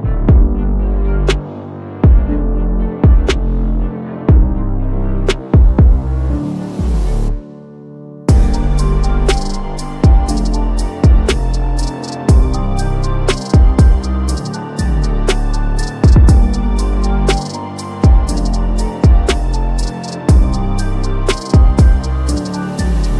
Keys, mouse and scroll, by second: 3.9 click, 7.2-10.3 drag, 12.2-13.4 drag, 16.2-17.6 drag.